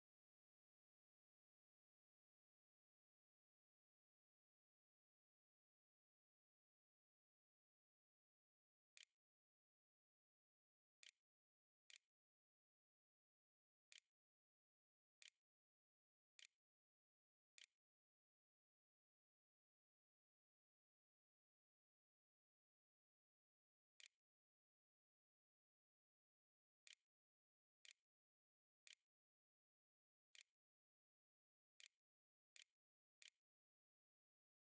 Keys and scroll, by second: 7.5-8.6 typing, 8.8 Return, 10.8-18.9 typing, 13.7 Tab, 23.5-25.1 typing, 26.5-34.3 typing.